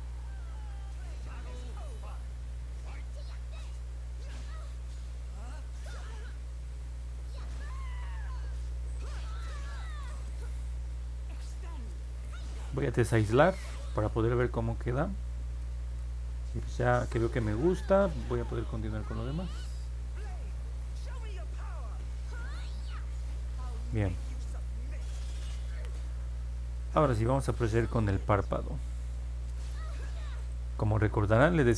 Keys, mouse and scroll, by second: 0.1 click, 0.6 click, 1.1 click, 1.5 click, 2.0 click, 2.5 click, 2.8 click, 3.2 click, 3.7 click, 4.0 click, 4.4 click, 4.8 click, 5.1 click, 5.4 click, 5.8 click, 6.1 click, 6.9 click, 15.0 middle click, 15.6 middle click, 17.7-18.1 scroll down 2, 18.8 scroll down 2, 19.5-21.0 middle drag, 21.6-22.0 scroll down 1, 22.2 middle click, 24.5 click, 25.3-25.8 scroll down 1, 26.8 alt+middle click, 30.3 click.